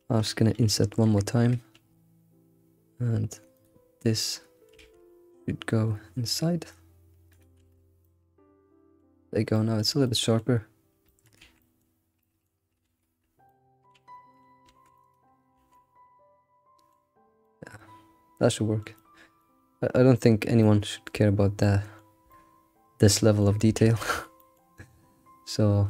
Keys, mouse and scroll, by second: 4.2 middle click, 7.6 alt+shift+z, 7.8 scroll down 3, 8.0-11.4 middle drag, 11.4 alt+shift+z, 11.6-12.8 middle drag, 12.8 alt+shift+z, 13.5 middle click, 13.9 alt+shift+z, 14.1 middle click, 14.7 ctrl+r, 15.0 ctrl+r, 15.5 alt+shift+z, 15.7-17.1 middle drag, 17.1 scroll down 4, 17.4-20.2 middle drag, 20.2-20.6 scroll up 2, 20.6-21.4 shift+middle drag, 21.4 scroll down 1, 21.6-23.8 middle drag, 23.8 alt+shift+z, 24.0-25.8 middle drag.